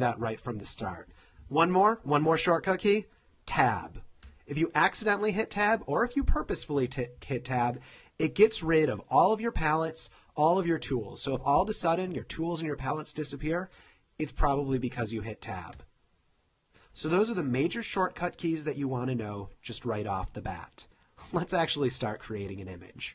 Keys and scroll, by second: 0.4 f, 4.4 Tab, 15.9 Tab.